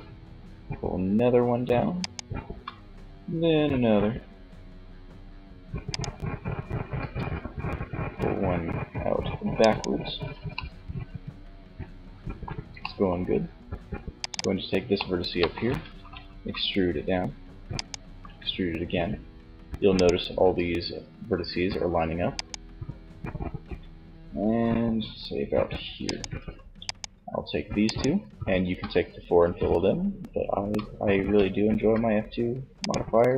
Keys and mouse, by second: 1.3-2.9 drag, 1.8 e, 5.1-6.2 drag, 6.2 e, 9.1 click, 9.8-10.9 middle drag, 15.4 e, 16.9-18.3 drag, 17.2 e, 19.3 e, 21.8-23.7 drag, 23.7 e, 26.1 click, 27.0-28.8 right drag, 29.0 f, 29.6 f, 30.2 f, 30.8 f, 32.0-33.3 right drag.